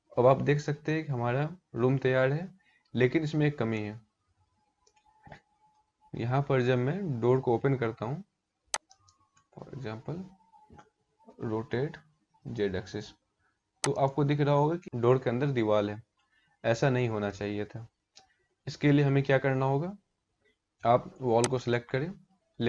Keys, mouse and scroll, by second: 3.3 middle click, 4.7-5.3 scroll up 5, 8.4 click, 11.0 r, 14.0 scroll up 2, 16.0-19.1 scroll down 2, 20.1 ctrl+z, 21.1 click.